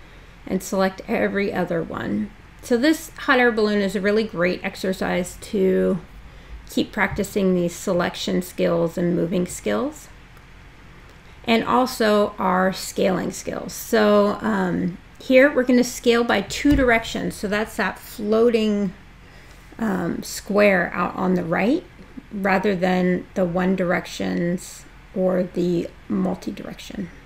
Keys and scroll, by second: 12.6 space, 24.3 space.